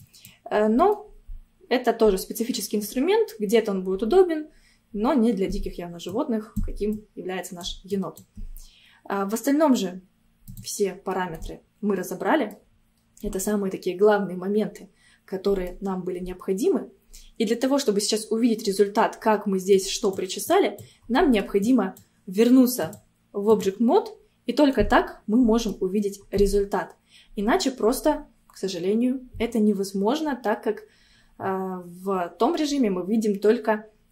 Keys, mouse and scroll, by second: 0.7 scroll down 1, 0.9-4.1 middle drag, 6.1-11.1 drag, 11.1 scroll down 1, 11.4-12.9 middle drag, 12.9 scroll up 1, 13.2-16.2 middle drag, 19.8-21.2 drag, 21.2 middle click, 21.7-24.6 drag, 24.6 scroll down 1, 24.8-25.9 middle drag, 25.9-26.3 scroll up 1, 26.3-29.4 middle drag.